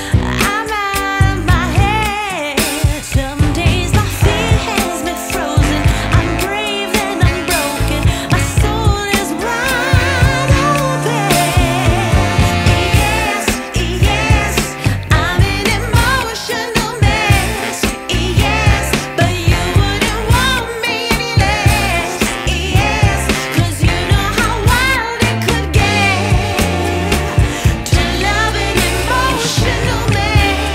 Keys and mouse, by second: 1.0 click, 1.6 click, 1.6 click, 1.8 z, 1.9 click, 2.4 space, 2.6 click, 3.2 space, 3.3 click, 3.3 click, 4.0 space, 4.1 click, 5.1 space, 5.3 click, 5.6 space, 6.3 click, 10.2 space, 10.4 click, 12.4 click, 12.4 space, 12.6 click, 13.0 space, 13.6 click, 14.0 space, 15.6 click, 16.1 space, 16.4 click, 16.7 space, 17.2 click, 20.3 click, 23.4 click.